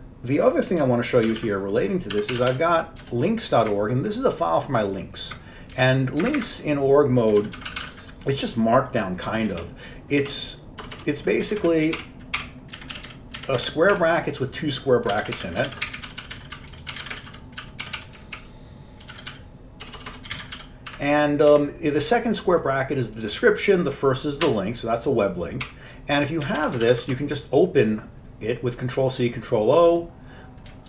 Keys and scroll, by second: 1.3 ctrl+x, 1.5-3.1 typing, 3.8 Up, 4.3 Up, 4.4-5.4 Up, 5.8 Down, 6.3 Up, 6.5 Up, 7.2-12.5 typing, 12.9 Left, 13.0 Left, 13.2 Left, 13.5 Left, 13.7 Left, 14.0 Right, 15.0-21.2 typing, 21.6 Left, 24.5 BackSpace, 26.7 Left, 26.7 Left, 26.9 ctrl+c, 27.1 ctrl+o.